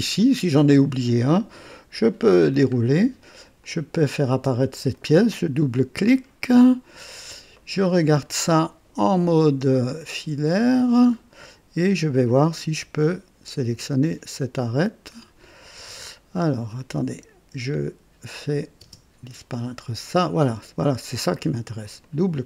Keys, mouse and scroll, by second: 2.1 click, 2.7-3.0 scroll down 1, 3.6 click, 4.2 space, 4.8 click, 6.0 scroll up 2, 6.5-8.3 drag, 7.5 right click, 9.7 click, 10.4 click, 11.0-11.3 scroll up 1, 12.4 click, 12.4 typing, 17.0 click, 18.2 click, 18.7 space, 18.9 space, 19.4 click, 21.8 click.